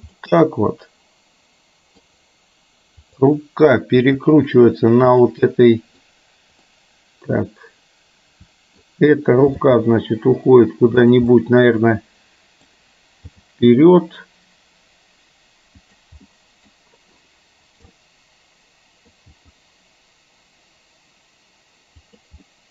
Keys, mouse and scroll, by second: 0.2-2.1 middle drag, 4.0 r, 5.6-6.1 middle drag, 6.7-9.0 middle drag, 9.6 g, 11.3-12.7 middle drag, 13.5 g, 16.3 middle click, 18.1-19.2 middle drag, 19.3 g, 22.6 middle click.